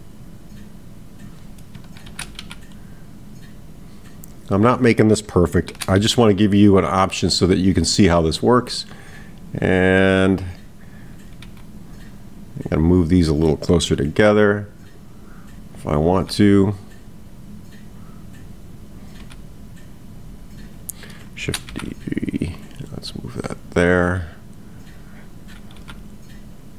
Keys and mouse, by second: 10.4 click, 13.2 click, 15.8 click, 18.3 click, 24.9 click.